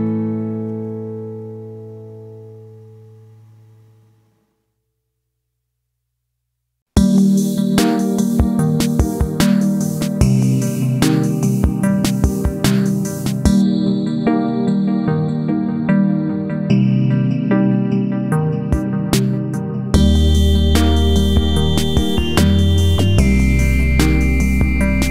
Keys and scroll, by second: 6.0 ctrl+a, 9.2 ctrl+z, 16.1 ctrl+a, 20.4 ctrl+c, 20.7 ctrl+v.